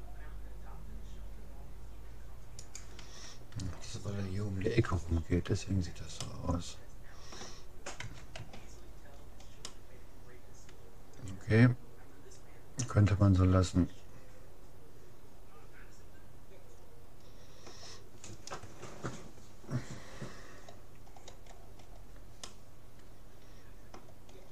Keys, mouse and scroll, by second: 4.9 a, 5.5 middle click, 8.0 Tab, 8.4 a, 21.1-24.1 middle drag, 24.3 middle click.